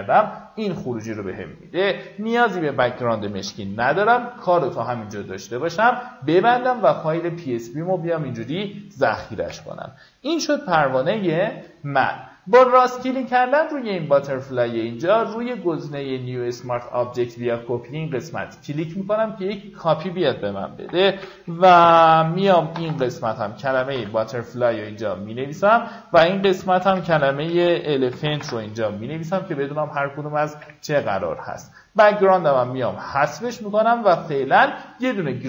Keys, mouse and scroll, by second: 0.3-1.8 alt+scroll down 1, 1.8 click, 3.0 v, 4.2-7.1 drag, 9.1 v, 9.6-11.1 drag, 11.9 right click, 16.9 click, 20.3-23.1 typing, 23.6 Return, 25.0 click, 26.0-27.8 typing, 28.0 Return, 29.3 click, 30.3 Delete, 32.5-35.4 drag.